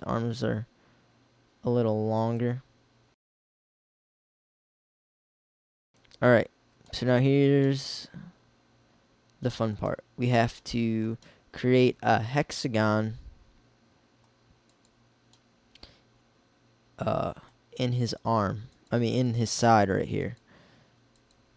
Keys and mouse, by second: 3.4 s, 4.4 s, 9.5-10.6 middle drag, 14.6-15.6 middle drag.